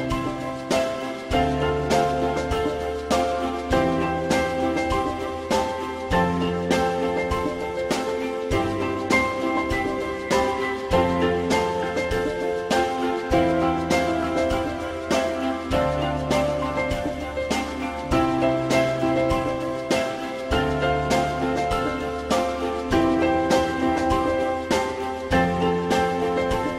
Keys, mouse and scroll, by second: 0.9 F4, 1.3 alt+middle click, 3.4 alt+middle click, 13.0 typing, 15.3 F4, 16.3 shift+double click, 25.3 alt+middle click.